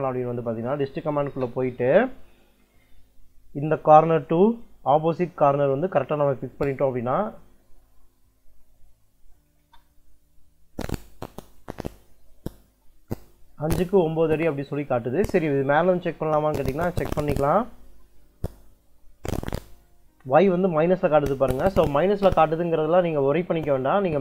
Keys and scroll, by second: 0.3 d, 0.7 i, 1.1 space, 7.9 Escape, 7.9 `, 8.1 Escape, 9.1 d, 9.3 i, 9.5 space, 16.5 space.